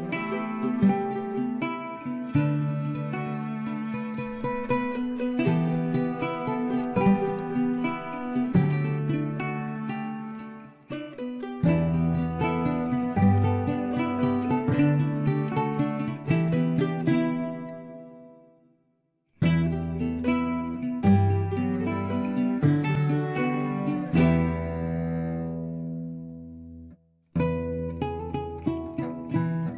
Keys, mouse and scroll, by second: 0.4 middle click, 1.0-2.3 scroll up 4, 2.3 scroll up 1, 2.6-4.7 right drag, 4.7 Tab, 5.3-5.7 scroll down 3, 5.7-6.3 middle drag, 6.3 Tab, 6.6 middle click, 6.9-7.5 scroll up 3, 7.5 scroll up 1, 7.7 ctrl+r, 8.8 r, 9.6 Tab, 9.8 scroll down 1, 10.0-10.9 middle drag, 10.9 scroll down 1, 11.1-12.1 middle drag, 12.1 scroll down 1, 12.3-13.1 middle drag, 13.1 click, 13.4 KP_1, 14.0 shift+middle drag, 14.3-14.7 scroll up 4, 14.7-15.9 shift+middle drag, 16.7 scroll down 1, 16.9-18.0 middle drag, 18.0 scroll up 6, 18.3 Tab, 18.9 click, 19.3 alt+shift+click, 19.9 r, 21.1 g, 22.5 click, 22.9 alt+shift+click, 23.4 r, 24.5 Tab, 24.8-25.6 scroll down 2, 25.6-28.7 middle drag.